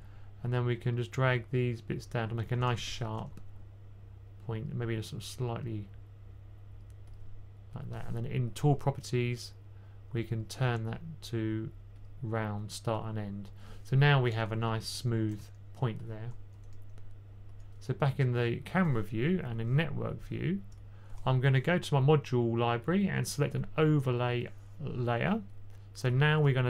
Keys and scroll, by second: 2.4 2, 2.5 2, 3.0 2, 5.8 typing, 14.4-14.9 typing, 16.4 1, 19.2 typing.